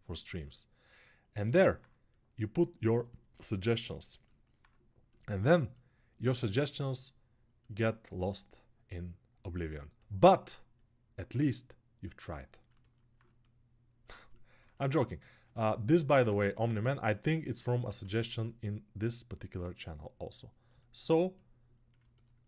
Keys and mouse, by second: 17.4-22.4 ctrl+alt+shift+drag.